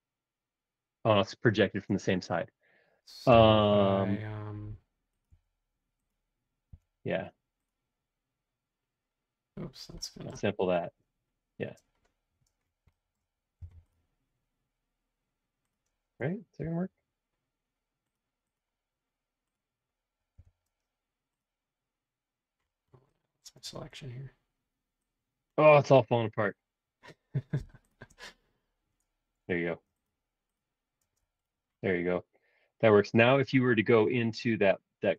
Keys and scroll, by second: 1.9 space, 3.3 m, 6.7 q, 13.6 m, 16.7 q, 20.4 b, 23.6 space, 29.4 b, 31.0 space.